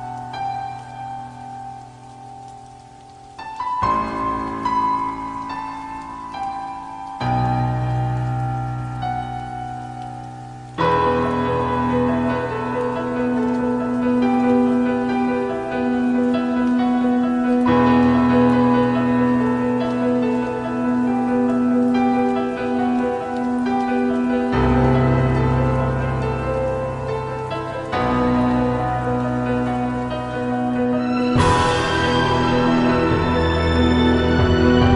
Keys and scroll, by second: 0.0-1.1 typing, 4.6 typing, 7.7 i, 8.6 i, 9.8 i, 10.9 i, 12.1 ctrl+z, 12.5 ctrl+z, 15.7 i, 18.2 ctrl+z, 18.7 ctrl+z, 19.1 ctrl+z, 19.7 ctrl+z, 20.7 ctrl+z, 21.2 ctrl+z, 25.6 ctrl+z, 26.5 ctrl+z, 26.6 -.